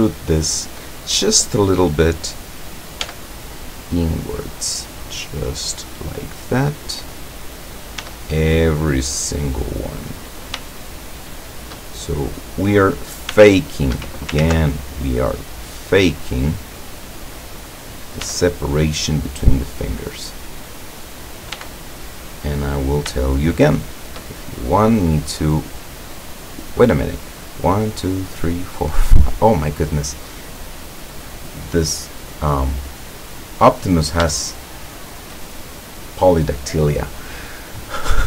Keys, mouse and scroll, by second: 3.1 e, 6.3 click, 6.9 right click, 8.0 e, 10.1 click, 10.7-11.9 shift+middle drag, 12.3 right click, 13.3 s, 14.3 ctrl+Escape, 14.4 ctrl+z, 15.7 right click, 16.3 right click, 18.3 e, 20.1 click, 20.7 right click, 21.6 e, 22.8 click, 23.2 shift+middle click, 24.0 shift+middle click, 24.4 shift+middle click, 25.0 shift+scroll down 1, 29.9 scroll down 1, 30.7 click, 32.3-33.5 drag, 33.5-34.1 scroll up 1, 34.3-35.4 shift+middle drag, 37.5-37.8 scroll down 2.